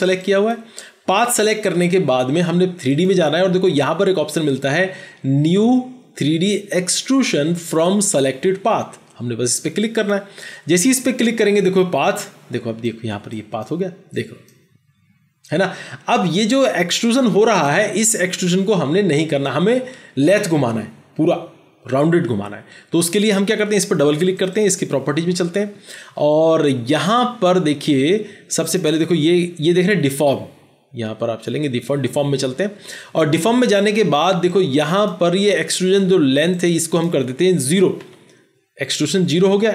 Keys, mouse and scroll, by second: 24.4 double click, 37.9 typing.